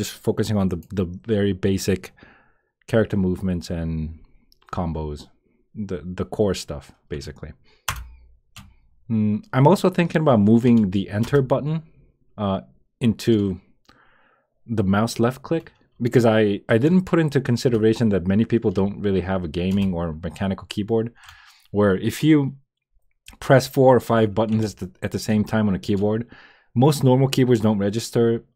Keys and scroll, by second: 7.8 Return, 11.2 Return, 17.6 Return, 19.7 Return, 25.3 Return.